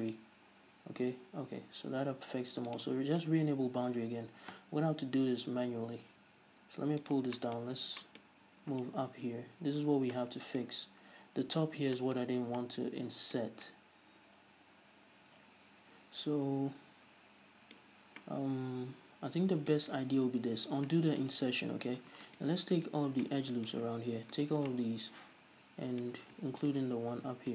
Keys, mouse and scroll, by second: 0.2 click, 5.3 t, 7.1 click, 7.5-22.3 shift+middle drag, 7.7-8.1 scroll up 1, 8.3 scroll up 1, 9.9-10.2 scroll down 1, 10.9-11.7 scroll down 1, 12.5 scroll down 1, 17.9 scroll up 1, 20.2 ctrl+z, 20.9 scroll down 1, 21.5 scroll down 1, 21.9-22.3 scroll up 1, 22.3 alt+right click, 22.8 alt+right click, 23.3-24.4 middle drag, 24.4-24.8 alt+shift+right drag, 24.8-26.7 middle drag, 26.7-27.5 shift+right drag.